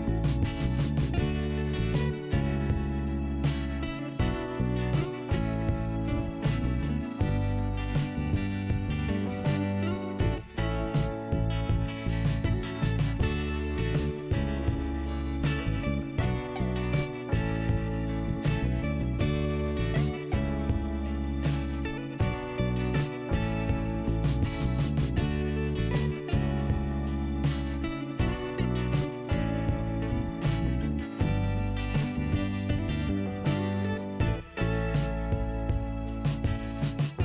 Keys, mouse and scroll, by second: 1.6 scroll up 1, 2.7 click, 5.6 click, 7.2 click, 15.2 click, 16.0 click, 16.2 click, 17.0 p, 17.9 click, 20.9 click, 23.9 click, 24.0 click, 25.1 click, 26.2 click, 26.9 click, 28.0 click, 28.9 scroll up 1, 30.0 click, 33.3 scroll down 1, 33.9 scroll up 1, 35.7 click.